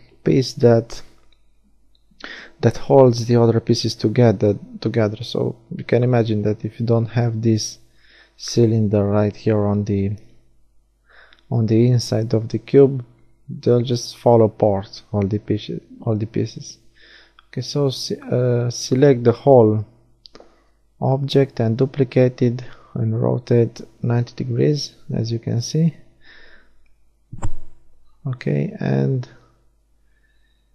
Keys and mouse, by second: 3.2-5.0 middle drag, 3.6 e, 4.3 s, 8.4-10.5 drag, 9.0 e, 11.0-12.0 drag, 11.2 a, 11.7 a, 14.0 shift+d, 15.4 r, 21.8 a, 22.2 z, 22.8 click, 26.0-27.7 right drag, 27.7 l.